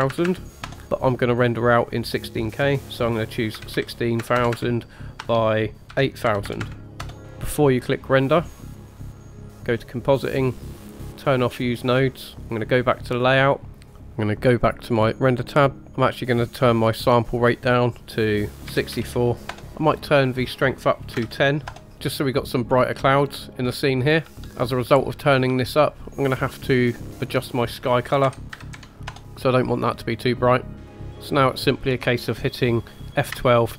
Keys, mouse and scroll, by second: 0.1 KP_0, 0.3 KP_0, 1.3-4.4 drag, 4.4 KP_0, 4.5 KP_0, 6.5 KP_0, 6.7 KP_0, 8.7 click, 12.6 click, 15.0 click, 15.8 click, 17.1-19.5 drag, 19.8-21.7 drag, 21.8 shift+middle click, 21.8 scroll up 3, 22.1-22.4 scroll down 4, 22.8-23.5 scroll up 3, 23.7-24.2 scroll down 5, 24.3 shift+middle click, 24.3 scroll up 1, 24.7 scroll down 1, 25.1 shift+middle click, 27.3 click, 30.9-33.5 drag, 33.6 F12.